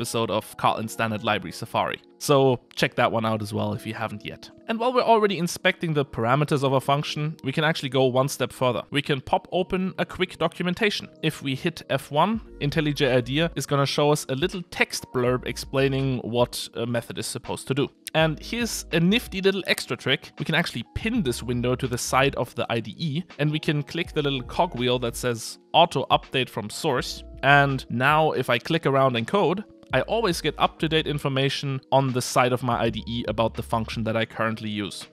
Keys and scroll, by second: 11.3 F1.